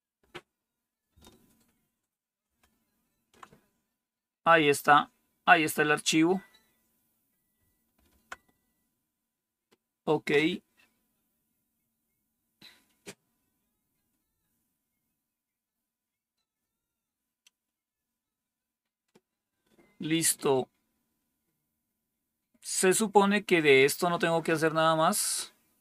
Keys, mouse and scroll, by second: 0.1 Return, 2.4 ctrl+-, 7.8 ctrl++, 11.7-12.4 scroll down 1, 12.4-13.0 scroll down 1, 13.0-14.3 scroll down 1, 14.3 scroll down 1, 20.3-24.8 scroll down 2, 24.8-25.8 scroll down 1.